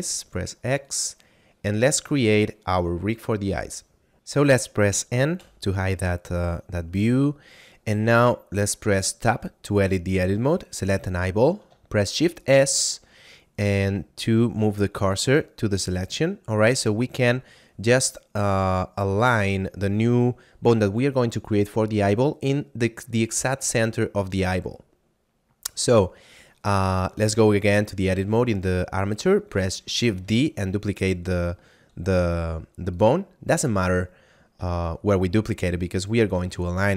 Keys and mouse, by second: 0.8 click, 4.1 F9, 5.2 n, 6.3 middle click, 7.2 shift+middle click, 8.9 Tab, 10.1 right click, 12.1 shift+s, 15.1 click, 25.6 right click, 26.5 shift+middle click, 27.1 Tab, 27.7 right click, 29.9 shift+d, 32.9 click, 34.9 shift+middle click.